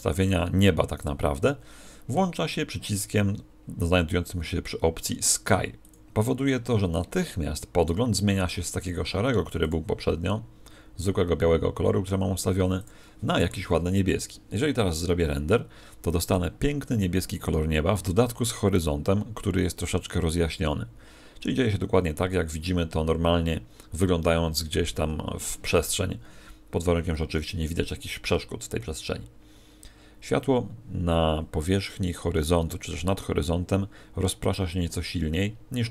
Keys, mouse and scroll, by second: 0.9 right click, 5.8 click, 9.6 click, 12.7 click.